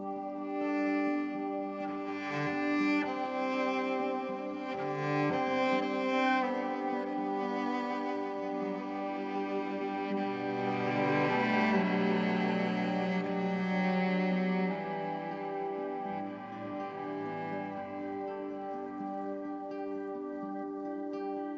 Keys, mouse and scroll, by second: 1.6 shift+click, 1.9 right click, 2.3 click, 13.1 F5, 17.3 Escape, 20.1 click.